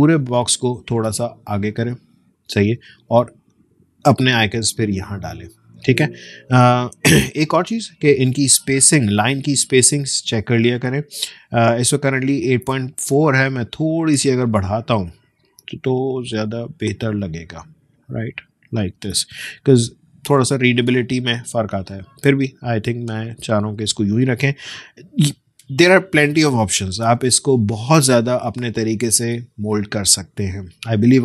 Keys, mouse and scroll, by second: 5.9 ctrl+z, 11.9 click, 12.9-14.0 scroll up 1, 15.0-18.1 drag, 19.4 ctrl+;, 21.0 ctrl+z, 24.1 click, 24.7 alt+scroll down 1.